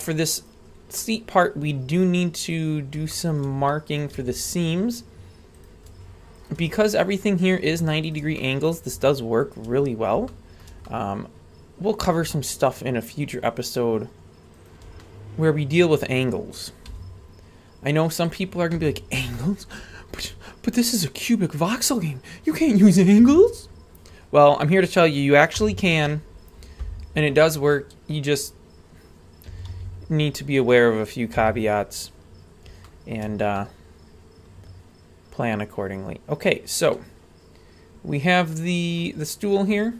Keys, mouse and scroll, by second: 0.4 right click, 1.0 middle click, 2.4 click, 3.1-3.5 shift+middle drag, 3.7 middle click, 4.2 a, 4.7-5.6 scroll up 2, 5.6-5.9 right drag, 6.4 shift+right drag, 6.8-7.5 middle drag, 8.1 shift+right click, 8.3-8.8 middle drag, 9.5 shift+right drag, 10.3-10.6 shift+middle drag, 10.9-12.0 middle drag, 12.6-13.5 shift+right drag, 14.6 shift+right drag, 15.0-15.8 middle drag, 16.9 w, 18.8 a, 19.3-19.7 shift+middle drag, 19.9-23.1 scroll down 1, 23.2 a, 25.6 u, 27.5 click, 28.4-29.5 scroll up 3, 29.5 a, 29.7 a, 29.9-31.0 scroll up 6, 31.0-31.3 scroll down 1, 31.3 a, 32.1-32.7 scroll up 2, 32.8-33.2 shift+middle drag, 33.4 scroll up 1, 33.5-35.5 middle drag, 35.8-36.9 scroll up 1, 36.9-39.0 middle drag, 39.3-39.9 scroll down 2.